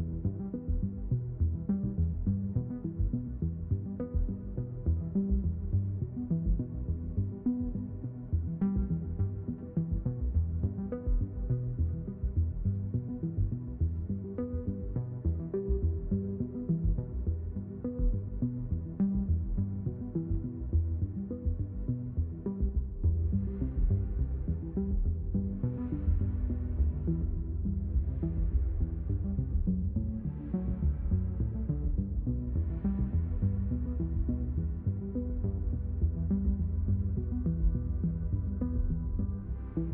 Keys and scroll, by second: 2.2-6.0 typing, 7.1-10.7 typing, 11.9 a.